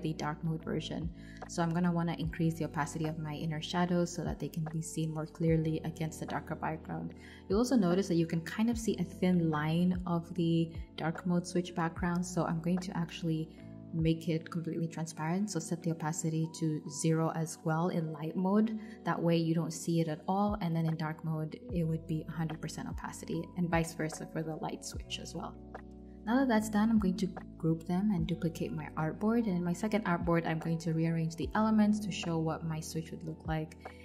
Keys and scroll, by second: 0.4 shift+Down, 0.9 shift+Up, 2.2 super+[, 10.5 super+g, 13.4-20.8 typing, 22.2 0, 23.7 v, 26.7 Return, 32.1 alt+Left.